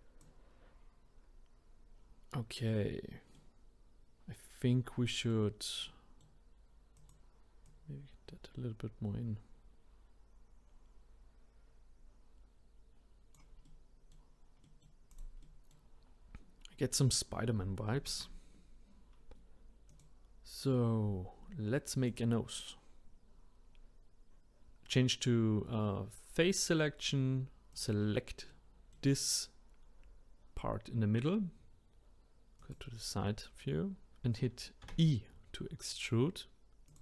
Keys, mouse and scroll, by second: 2.1-3.3 scroll up 1, 3.3-6.9 middle drag, 6.9 click, 7.6 click, 13.6-15.1 middle drag, 15.1 click, 15.4-18.0 middle drag, 18.0 ctrl+s, 19.9 click, 22.1 click, 27.7 click, 28.5-32.6 middle drag, 32.6 click, 34.8 e.